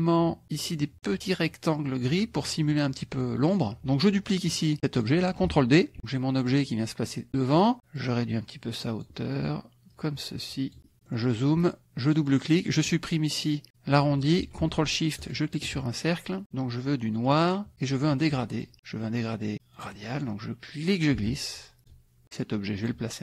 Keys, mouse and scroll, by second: 4.5 click, 6.4 click, 7.9-9.2 drag, 9.9-10.9 drag, 10.9 middle click, 12.0 click, 15.3 ctrl+shift+click, 17.2 click, 18.5 click, 19.7 click, 20.9 ctrl+click, 21.9 ctrl+click, 22.8 click.